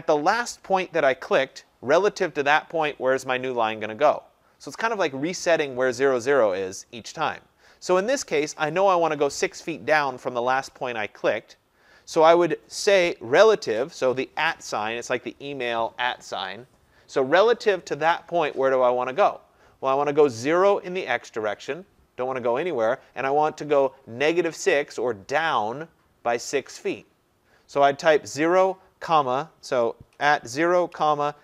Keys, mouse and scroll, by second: 13.7 shift+2, 16.0 typing, 30.2-31.4 typing.